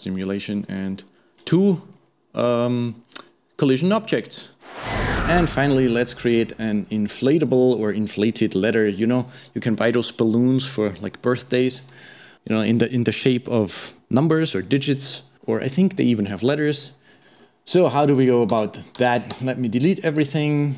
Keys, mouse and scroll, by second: 1.0-1.4 scroll up 1, 1.4 click, 1.9-2.3 scroll down 3, 2.3-4.6 scroll up 1, 5.4-8.3 middle drag, 17.2 scroll down 3, 17.3-17.8 scroll up 2, 17.8-18.5 middle drag, 18.5 a.